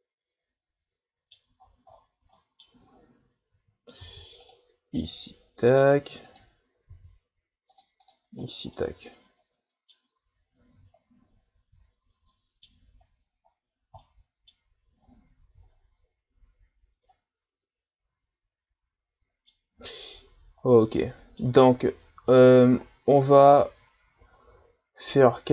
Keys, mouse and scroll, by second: 1.6-2.2 ctrl+scroll down 12, 2.4 middle click, 3.0-3.5 scroll up 1, 4.0 ctrl+r, 6.9 ctrl+r, 8.5-8.8 scroll down 3, 8.8-10.5 middle drag, 10.5-11.3 ctrl+scroll down 1, 11.3-12.3 scroll down 5, 12.3-13.5 middle drag, 13.5-14.0 scroll down 1, 14.0 middle click, 15.0-15.5 scroll up 1, 15.7-16.4 shift+scroll down 3, 16.4-16.8 scroll up 2, 17.1-20.7 middle drag, 20.7 scroll down 1, 21.0 middle click, 21.8-22.1 ctrl+scroll up 3, 22.5-22.8 shift+scroll up 6, 22.8-23.5 scroll down 1, 23.5-25.5 middle drag.